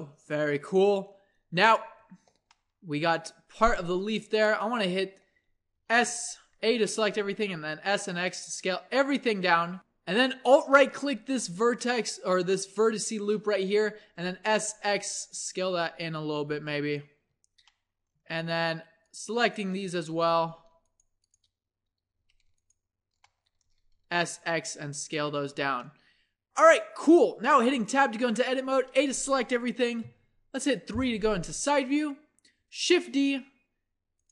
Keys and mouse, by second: 0.4 middle click, 1.6 middle click, 2.1 Tab, 3.9 click, 4.8 Tab, 5.4-7.0 typing, 10.7-12.4 drag, 14.1 s, 17.3 Tab, 18.2 Tab, 20.1 z, 22.2 a, 24.0 z, 24.0 s, 25.5 Tab, 27.6 Tab, 28.1 a, 28.4 a, 30.0 KP_3, 32.6 shift+d.